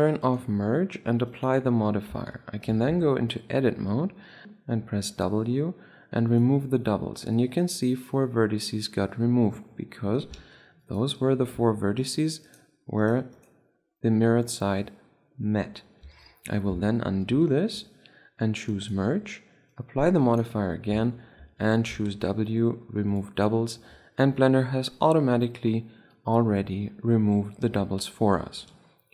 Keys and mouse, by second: 2.4 Tab, 3.0 a, 3.2 a, 3.3-9.5 middle drag, 4.4 w, 9.9-10.7 middle drag, 10.7 ctrl+Tab, 11.4 middle click, 11.8 middle click, 11.9 z, 14.3-15.5 right drag, 15.7 middle drag, 16.3 Tab, 17.2 ctrl+z, 17.7 ctrl+z, 19.0-21.1 drag, 21.3 Tab, 21.7 a, 21.9 a, 22.3 w, 27.6 middle click, 28.1 Tab, 29.0 Tab.